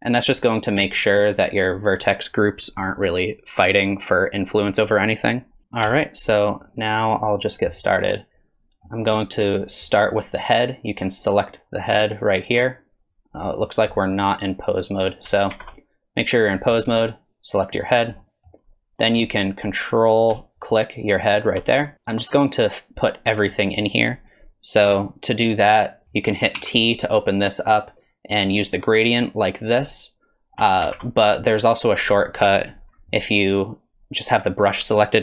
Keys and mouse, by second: 5.8 KP_3, 8.1 middle click, 11.2 ctrl+click, 13.4 drag, 14.0 click, 15.5 ctrl+Tab, 16.6 middle click, 17.5 click, 18.2 middle click, 21.0 ctrl+click, 23.5 middle click, 26.6 t, 29.2 click, 30.8 ctrl+z, 31.9 click.